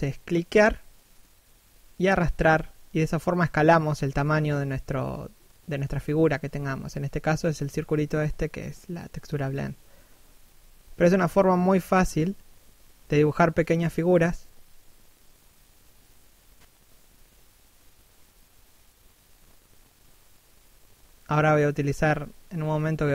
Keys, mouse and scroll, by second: 0.2 middle click, 1.1 click, 1.8 middle click, 2.5 click, 3.3 shift+middle click, 3.9 click, 5.0 click, 6.1 click, 7.0 shift+middle click, 7.7-8.4 scroll up 1, 8.6 click, 9.7 click, 10.8 click, 11.8 middle click, 12.3-12.8 scroll up 1, 12.8 click, 13.9 click, 15.8 scroll down 1, 16.1 middle click, 19.6 scroll up 1, 20.2 click, 22.2 middle click.